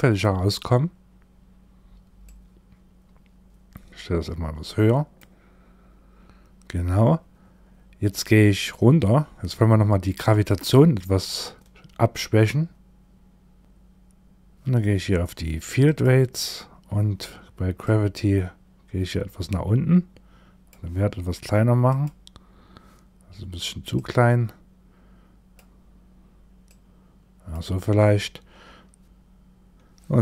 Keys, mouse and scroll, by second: 1.7 click, 8.0-13.6 scroll down 9, 15.3 click, 16.0-17.3 scroll down 3, 17.3 click, 21.3 click, 23.4 click, 26.1 click.